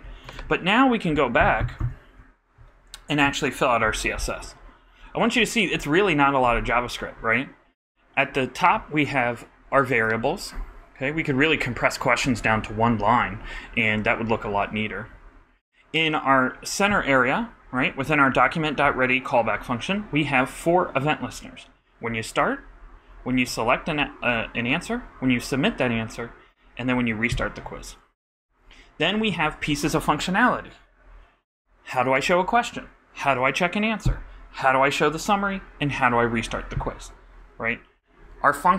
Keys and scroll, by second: 1.4 super+-.